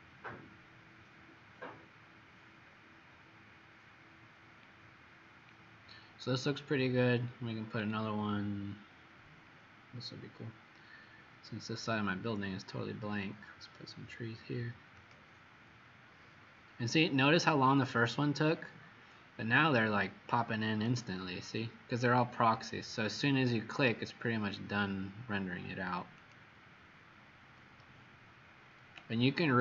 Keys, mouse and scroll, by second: 4.7 scroll down 2, 7.7-8.5 scroll down 4, 8.5-9.1 scroll down 4, 9.9 middle click, 15.0 click, 16.1-17.1 scroll down 6, 17.1-17.7 scroll down 3, 20.9 click, 22.7 middle click, 26.3 click.